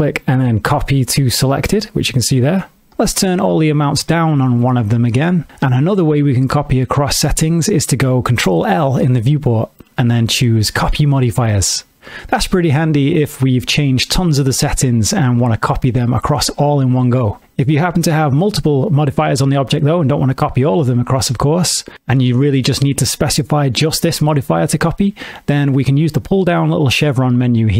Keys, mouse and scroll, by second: 3.6 click, 8.8 ctrl+l, 13.7 middle click, 15.1 middle click.